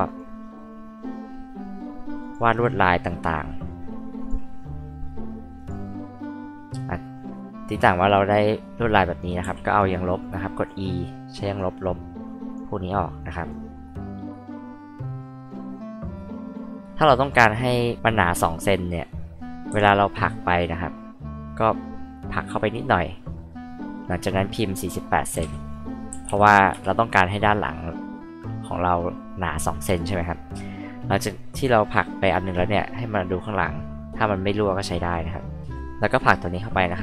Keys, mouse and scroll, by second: 0.1 click, 0.3-0.7 scroll up 2, 2.2 click, 4.2 click, 5.5 click, 9.4 e, 9.9 click, 11.3 click, 12.2 click, 13.2 click, 14.6-15.2 scroll up 2, 15.2 click, 15.7-16.1 scroll down 2, 16.1 click, 16.8-17.2 scroll up 2, 17.2 scroll down 2, 17.3 scroll up 2, 20.3-24.2 drag, 25.3 KP_4, 25.5 KP_8, 26.1 c, 26.7 Return, 36.1-37.0 drag.